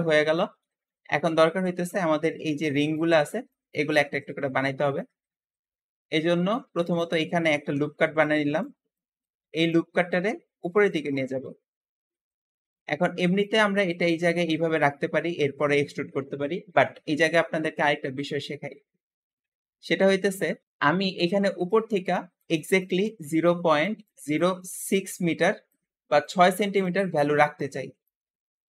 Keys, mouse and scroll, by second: 0.9-1.5 scroll up 1, 4.1 Escape, 4.3 scroll down 1, 4.7 shift+middle click, 5.4 Tab, 5.5 Tab, 5.7 scroll up 1, 6.2 shift+middle click, 6.6 alt+a, 6.8 alt+a, 7.5 ctrl+r, 8.9 ctrl+middle click, 9.8 scroll up 1, 10.8 shift+click, 14.2-17.6 scroll up 2, 19.0 ctrl+z, 19.1 ctrl+z, 19.2 ctrl+z, 19.4-19.9 scroll down 1, 19.9 shift+middle click, 20.6-21.3 scroll up 3, 21.3-23.4 scroll up 1, 23.4-25.5 scroll up 1, 25.5-27.3 scroll up 1, 27.3-28.3 scroll up 1, 28.3 Escape, 28.5 scroll down 1, 28.6 scroll up 1.